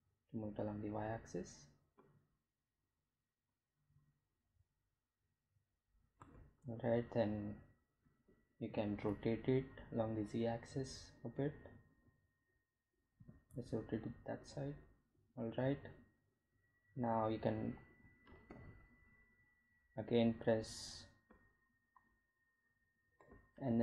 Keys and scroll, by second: 1.6 g, 1.8 y, 13.3 r, 13.7 z, 18.3 r, 18.6 z, 22.5 g, 22.6 z.